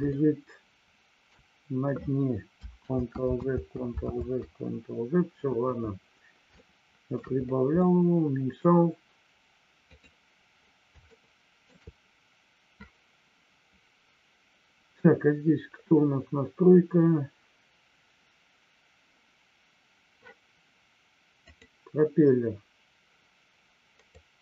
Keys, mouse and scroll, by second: 0.1-1.3 shift+middle drag, 4.3 ctrl+z, 6.6 shift+middle click, 7.7 middle click, 9.9 click, 11.1 shift+middle click, 21.5 click, 24.1-24.4 drag.